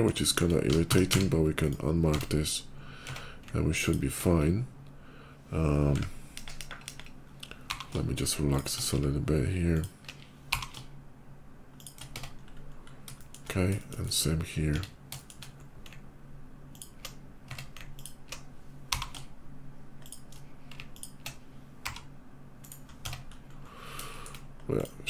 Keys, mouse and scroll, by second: 0.1 shift+middle click, 0.7 a, 0.9 q, 1.4 click, 1.9 Tab, 2.6 middle click, 3.4 alt+Tab, 3.7 click, 6.1 KP_5, 6.4 KP_5, 6.7 KP_5, 7.5 g, 8.3 click, 9.6 click, 10.1 g, 11.6 click, 11.6 g, 12.0 Tab, 12.3 middle click, 12.5 middle click, 13.6 middle click, 14.0 shift+middle click, 14.5 Tab, 15.0 shift+middle click, 16.5 click, 17.2 Tab, 17.8 alt+Tab, 17.8 click, 18.5 g, 19.9 click, 19.9 shift+g, 20.7 alt+click, 21.5 r, 22.4 right click, 22.8 Tab, 23.1 middle click, 23.3 middle click, 23.6 middle click, 23.8 shift+middle click, 23.9 shift+middle click, 24.5 shift+click, 24.8 scroll down 1.